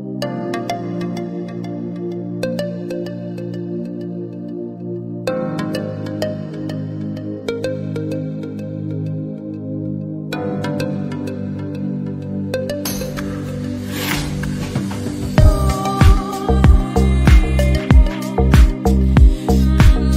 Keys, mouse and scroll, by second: 0.8 e, 1.5 s, 2.5 g, 3.4 g, 4.2 shift+middle click, 4.8 scroll up 1, 5.0-10.3 typing, 5.7 alt+z, 7.8 shift+middle click, 8.2 alt+z, 10.6 middle click, 10.8 middle click, 11.6 alt+click, 11.8 s, 12.7 middle click, 13.3 KP_1, 13.5 shift+middle click, 13.9 click, 14.4 click, 14.6 s, 16.8-17.2 scroll down 2, 17.3 alt+z, 17.6 click, 18.5 alt+z, 18.6 alt+z, 19.0 click, 19.2 s.